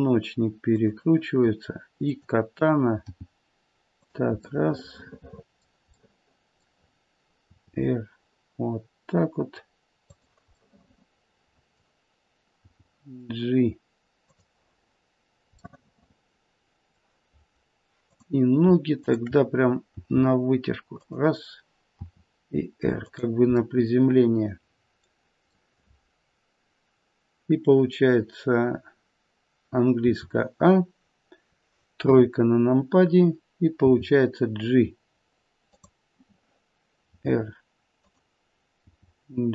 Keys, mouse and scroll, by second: 2.0 click, 3.0 g, 4.6 middle click, 5.0 middle click, 5.4 middle click, 5.9 middle click, 6.1 middle click, 7.5 r, 10.7 middle click, 12.6 g, 15.6 middle click, 16.5 middle click, 18.0 click, 18.9 shift+click, 19.9 g, 22.0 r, 23.5 middle click, 24.1 middle click, 24.6 middle click, 30.0 a, 32.0 KP_3, 33.8 g, 37.1 r, 38.7 g.